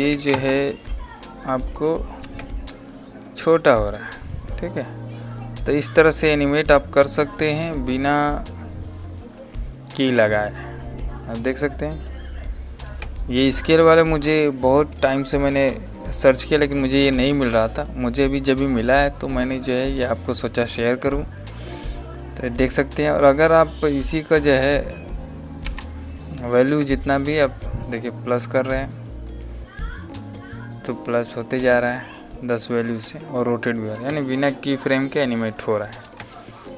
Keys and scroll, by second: 0.0 KP_1, 0.3 KP_0, 2.2 space, 12.8 space, 25.5 Delete, 26.6 space, 33.9 space.